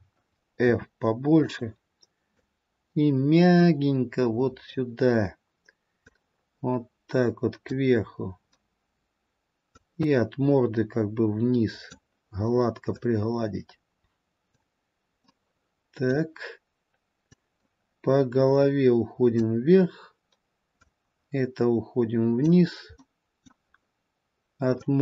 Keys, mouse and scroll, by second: 3.0 click, 6.4 click, 10.2 click, 13.5 click, 15.4 middle click, 17.9 click, 21.3 click, 23.1 middle click.